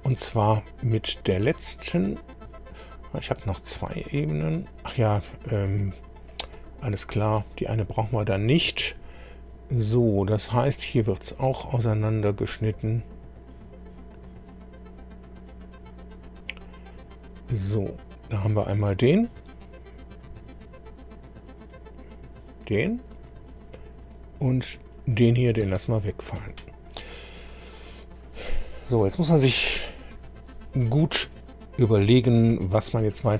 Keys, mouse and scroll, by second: 6.5 ctrl+click, 11.4 click, 13.9-14.5 scroll down 2, 15.3 click, 15.8-16.1 scroll down 1, 16.9 click, 20.1 click, 21.6 click, 23.1 click, 24.6 click, 25.6 space, 26.8-27.1 scroll down 2, 33.0-33.3 scroll up 2.